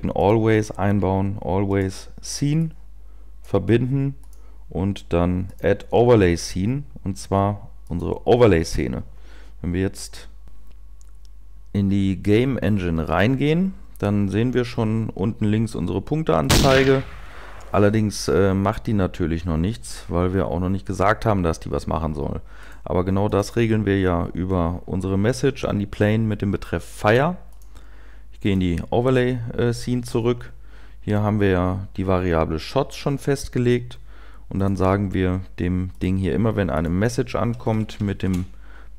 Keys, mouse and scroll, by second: 13.1 0.